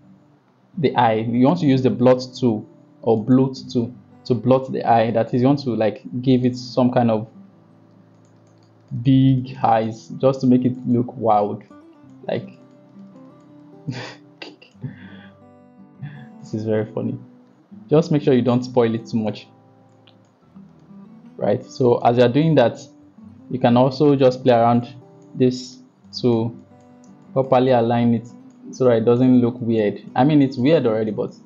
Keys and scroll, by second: 5.2 ], 5.5 ], 7.1-7.9 typing, 16.3 ctrl+z, 23.1 [, 24.3 ], 24.4 ].